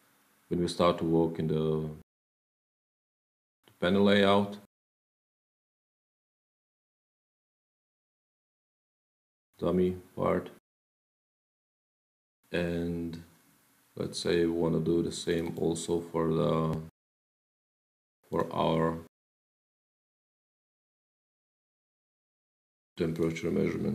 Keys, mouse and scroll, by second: 6.8 click, 7.7 click, 9.3-9.6 scroll, 9.6-10.2 scroll down 10, 11.8 Page_Down, 15.2 click, 16.3 middle click, 16.3-17.6 scroll, 16.7 middle click, 18.2 click, 18.6 click, 19.1 ctrl+click, 21.1 click, 23.0 click.